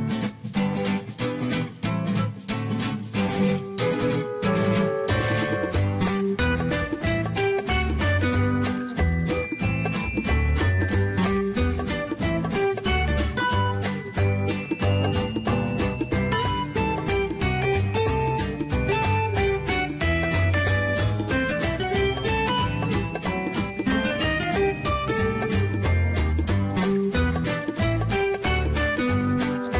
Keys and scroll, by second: 0.6 Escape, 3.2 Escape, 7.2-8.7 typing, 15.6-17.0 typing, 25.2 Escape, 28.8 Escape.